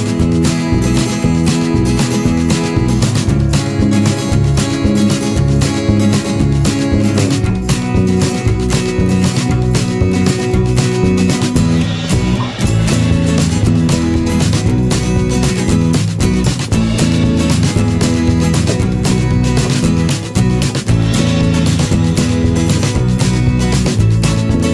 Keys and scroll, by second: 3.6 ctrl+0.